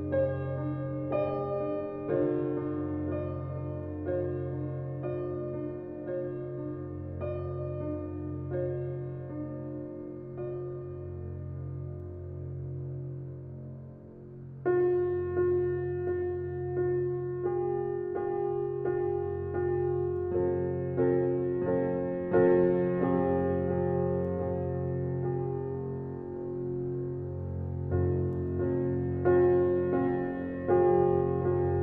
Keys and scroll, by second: 3.1 a, 11.0 space.